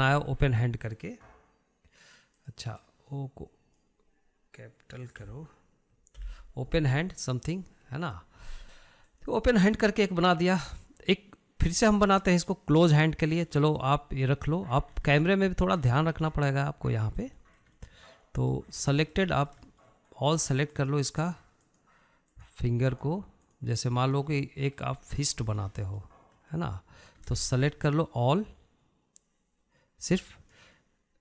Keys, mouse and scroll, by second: 10.6 click, 14.0-15.0 middle drag, 15.0 scroll up 1, 15.3-16.5 shift+middle drag, 16.5 scroll up 1, 16.6-20.3 shift+middle drag, 20.3 scroll up 3, 20.6-22.3 shift+middle drag, 22.3 click, 23.2 shift+click, 23.9 shift+drag, 24.5 shift+drag, 25.0 shift+drag, 25.6 shift+click, 26.0-28.8 middle drag, 28.8 scroll down 1, 29.0-30.0 shift+middle drag, 30.0 click.